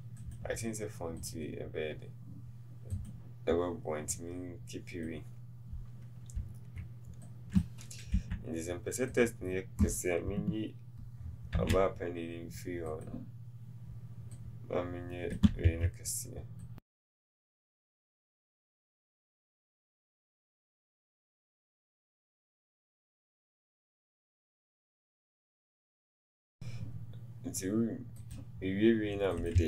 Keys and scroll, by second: 15.6 ctrl+z, 19.5 t.